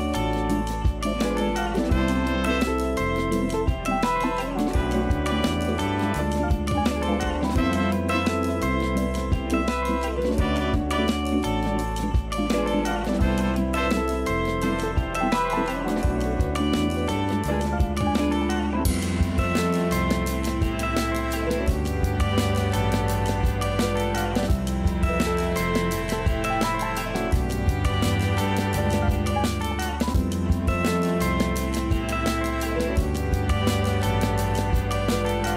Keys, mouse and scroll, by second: 0.2 Tab, 0.6 a, 0.9 s, 3.4-4.0 scroll up 1, 4.0 shift+middle click, 4.5 scroll up 3, 5.1 a, 5.3 a, 5.6 z, 5.8 b, 7.1 g, 8.1 scroll down 2, 8.3 a, 8.5 a, 8.6 click, 9.4 g, 10.6-11.1 scroll up 1, 11.1 shift+middle click, 11.6-12.0 scroll up 2, 12.0 g, 13.3-14.0 scroll down 12, 14.0-15.5 typing, 15.0 Tab, 16.0-17.4 middle drag, 17.4 click, 17.9 Tab, 18.0 scroll up 2, 18.3 a, 18.9 KP_1, 19.0 KP_1, 19.3 KP_3, 20.6 scroll up 1, 21.0 a, 21.1 a, 21.4 z, 21.7 b, 23.0 g, 24.3 a, 24.5 a, 24.7 click, 25.3 g, 26.6 a, 26.8-27.8 scroll down 2, 27.8 a, 28.0 scroll up 1, 29.1 click, 30.2 scroll up 2, 30.6 click, 31.9-32.9 shift+middle drag, 32.9 g, 34.2-34.6 scroll down 10, 34.7 a, 34.9 a, 35.3 z.